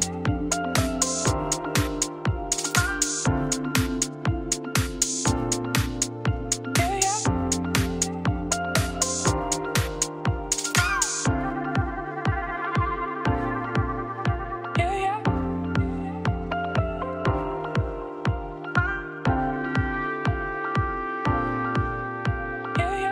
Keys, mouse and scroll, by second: 0.4 click, 0.7-1.2 scroll down 2, 0.8 middle click, 1.2 shift+middle click, 1.4 scroll up 1, 1.5-3.1 middle drag, 3.1 click, 3.2 Tab, 3.4 middle click, 3.5 3, 3.6 click, 3.9 shift+s, 4.0 Tab, 4.5-6.0 shift+middle drag, 6.0 shift+a, 9.0 r, 10.6 middle click, 10.9 s, 12.0 shift+middle click, 12.6-13.4 scroll up 4, 13.4-14.6 shift+middle drag, 14.6 g, 16.1 middle click, 16.8 click, 17.1 Tab, 18.3-20.7 typing, 20.4 click, 21.8 z, 22.1 click, 22.4 g.